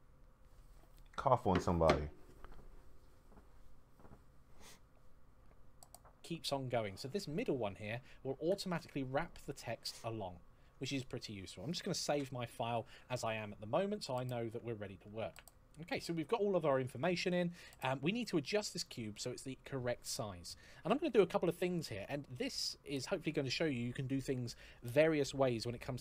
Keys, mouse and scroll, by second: 8.2 click, 11.8 ctrl+s, 13.6-14.0 scroll down 1, 14.0-15.3 scroll up 1.